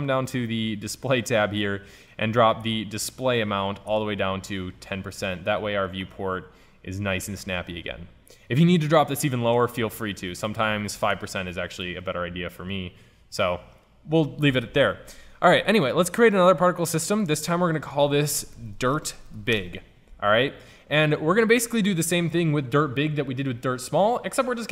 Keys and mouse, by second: 2.8-4.4 drag, 5.3-6.2 middle drag, 6.7 middle click, 12.1-12.6 middle drag, 13.8-14.3 middle drag, 16.4-19.1 drag.